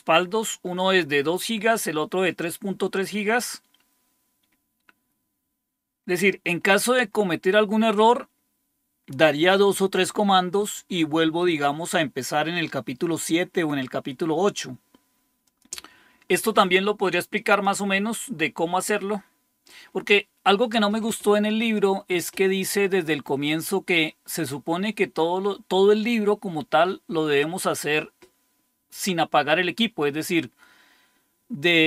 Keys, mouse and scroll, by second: 15.4 click, 17.5-19.7 drag, 21.5 click.